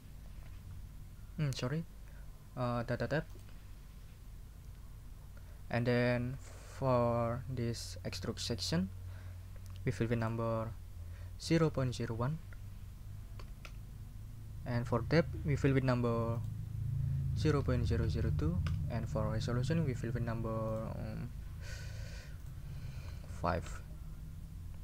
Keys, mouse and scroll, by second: 3.3 click, 5.3 scroll down 1, 10.2 click, 11.2-13.4 typing, 13.6 Return, 16.3 click, 17.1-18.7 typing, 20.7 middle click, 22.4 middle click, 23.5 5, 23.6 Return.